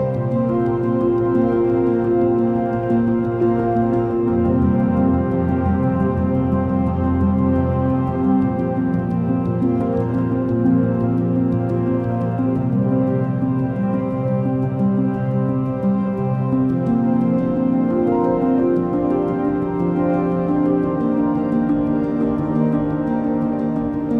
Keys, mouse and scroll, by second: 5.8 click, 6.9-9.3 drag, 9.3 scroll down 3, 10.0-11.6 scroll down 5, 13.4-14.1 drag, 14.1-14.8 scroll down 3, 14.8-15.6 drag, 15.6-16.7 scroll down 3, 16.9-20.5 drag, 22.6 click.